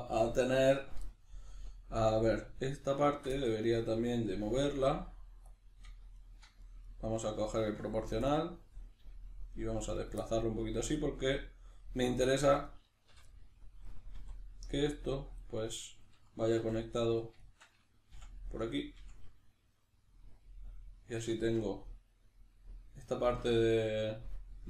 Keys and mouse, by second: 2.7 right click, 3.0 shift+right click, 3.3-5.5 middle drag, 4.8 g, 5.5 click, 5.8 right click, 6.1 shift+right click, 6.6 right click, 6.8 right click, 7.5 shift+right click, 8.2 click, 9.0 g, 10.1 click, 10.1-12.6 middle drag, 12.6 right click, 13.1 l, 13.3-15.4 middle drag, 14.2 r, 15.4 click, 15.6-24.6 middle drag, 16.6 2, 17.0 right click, 17.4 shift+right click, 18.2 f, 18.6 right click, 19.0 f.